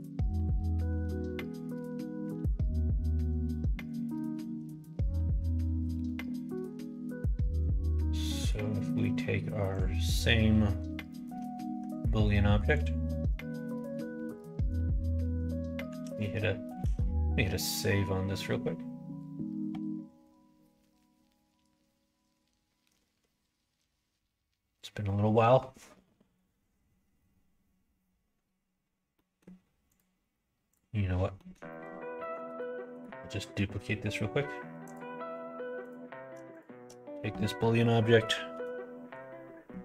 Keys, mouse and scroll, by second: 0.3 g, 0.8 click, 0.9 g, 1.8 click, 2.2 Tab, 2.5 click, 3.0 middle click, 3.6 middle click, 4.2 middle click, 5.2 middle click, 9.6 click, 11.0 middle click, 11.7 Tab, 12.7 click, 13.1 Tab, 13.5 click, 14.2 shift+click, 15.9 ctrl+s, 16.7 ctrl+s, 29.1 middle click, 29.8 click, 30.7 click, 31.3 middle click, 31.6 middle click, 32.2 middle click, 32.4 shift+d, 34.8 click, 35.8 click, 36.5 shift+click, 38.5 ctrl+-.